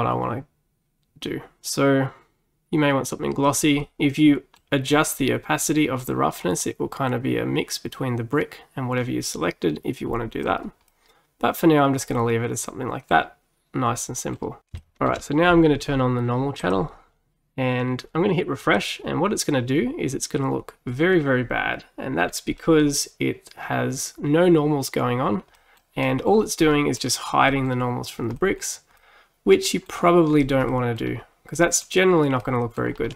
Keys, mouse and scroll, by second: 3.9-6.1 middle drag, 6.1-9.1 drag, 10.9-14.0 middle drag, 14.0-16.7 middle drag, 16.7 click, 18.7-21.7 drag, 22.3-22.6 scroll down 3, 22.6-26.4 middle drag, 26.4-26.8 scroll up 3, 26.8-30.3 middle drag, 30.3-30.8 scroll down 3, 30.8-32.9 middle drag, 32.9-33.1 scroll up 3.